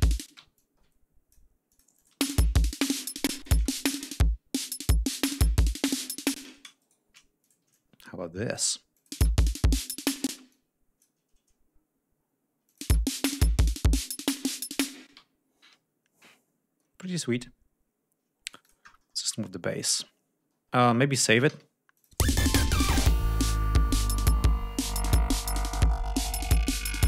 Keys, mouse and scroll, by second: 0.1 space, 0.4-1.4 ctrl+drag, 1.5-2.1 drag, 2.0 space, 3.1 space, 3.2 click, 6.2 space, 6.6 shift+right click, 7.3 ctrl+shift+click, 7.6-8.6 ctrl+shift+drag, 8.8 click, 9.0 space, 10.1 space, 10.3 click, 11.6 scroll up 2, 12.5 click, 12.7 space, 14.9 space, 15.1 ctrl+scroll down 2, 16.4-17.1 scroll down 4, 18.3-18.7 drag, 19.2-19.6 ctrl+scroll down 2, 20.4 ctrl+scroll up 2, 21.3 ctrl+s, 21.8 ctrl+click, 22.0 ctrl+space, 22.4 ctrl+scroll up 2, 23.4 scroll down 2, 23.9-24.3 scroll down 2, 24.3-24.7 scroll up 2.